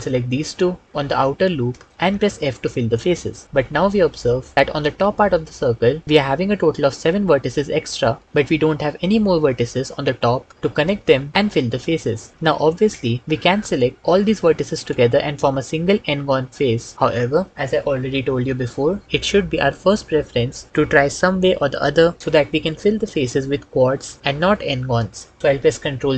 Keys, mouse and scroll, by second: 1.9 f, 15.6 f, 26.0 ctrl+z.